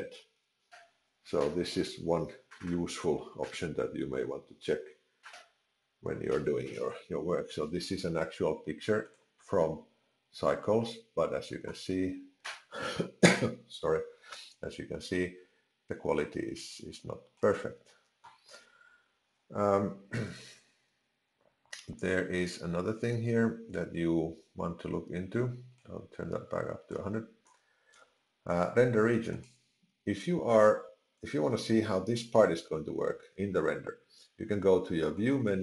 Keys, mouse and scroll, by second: 25.8 click, 29.4 click, 35.1 click.